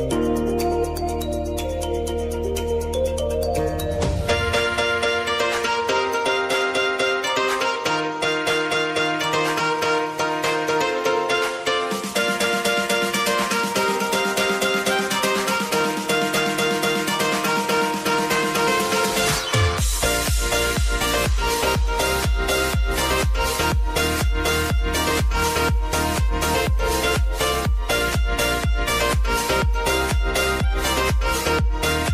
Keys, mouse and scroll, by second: 1.3 space, 2.2 click, 4.6 space, 6.6 click, 9.0 space, 11.6 space, 12.3-16.2 drag, 16.4 space, 17.5 click, 17.9 space, 19.5-23.9 drag, 23.9 space, 26.1-32.1 drag.